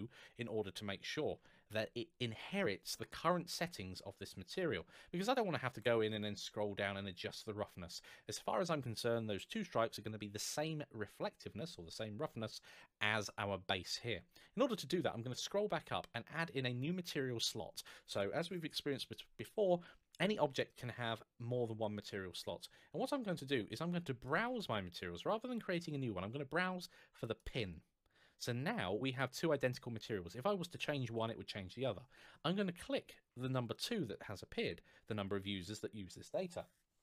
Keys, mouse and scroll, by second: 2.8 scroll down 1, 3.8 scroll up 1, 5.6 scroll down 1, 14.2 scroll up 1, 20.3 click, 24.0 click, 27.2 click.